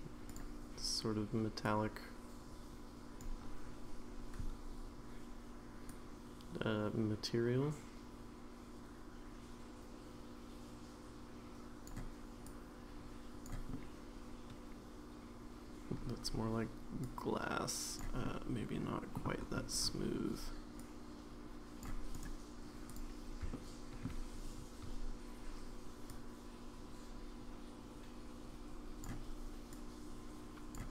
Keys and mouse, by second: 0.3 click, 6.0-11.9 drag, 12.4-13.4 drag, 13.7-15.9 middle drag, 17.2 click, 18.2 middle click, 20.8-21.8 drag, 22.1 right click, 23.5 shift+middle click, 26.1-29.0 drag, 29.8 click.